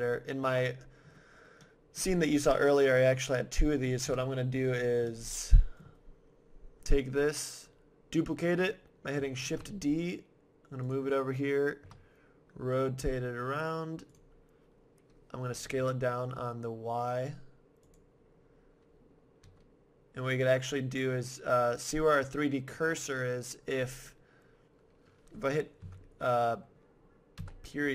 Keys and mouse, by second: 1.6 middle click, 4.0 KP_7, 9.4 shift+d, 10.9 click, 11.8 r, 14.2-16.0 drag, 15.5 s, 16.0-17.1 middle drag, 17.9-19.8 drag, 19.4 g, 20.5-22.3 drag, 23.7-25.8 middle drag, 25.8 ,, 27.4 ..